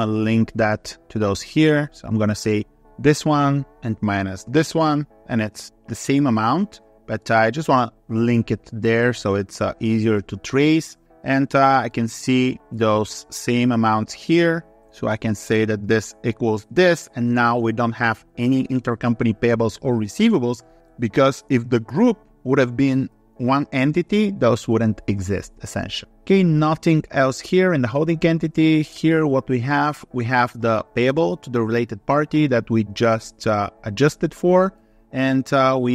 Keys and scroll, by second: 15.4 ctrl+Up.